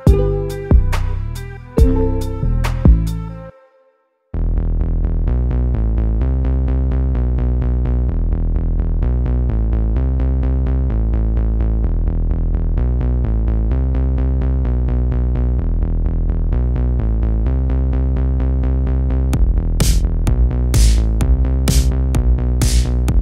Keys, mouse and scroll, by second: 1.1-2.8 middle drag, 2.8-3.2 scroll down 1, 3.2-7.0 middle drag, 8.1-12.6 middle drag, 12.6-13.6 drag, 13.6-16.2 middle drag, 16.2-17.4 ctrl+drag, 17.4 ctrl+z, 19.3-21.0 ctrl+middle drag, 21.0-22.0 ctrl+drag, 22.0 ctrl+z, 22.5-23.2 ctrl+drag.